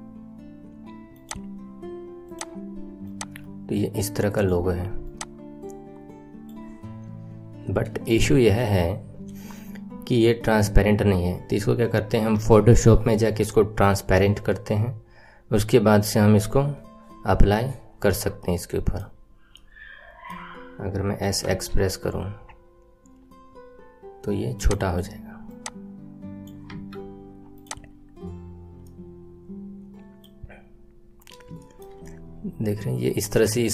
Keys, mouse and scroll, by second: 2.4 click, 5.5-18.6 drag, 18.6 middle click, 19.1-19.5 scroll down 4, 19.5-21.2 middle drag, 21.2 s, 25.6 click, 26.7 Tab, 27.0-27.6 scroll down 6, 27.6 click, 28.0-28.4 scroll up 6, 28.4-28.7 scroll down 2, 28.8-30.4 middle drag, 30.4-30.9 scroll up 3, 31.6-33.7 shift+middle drag.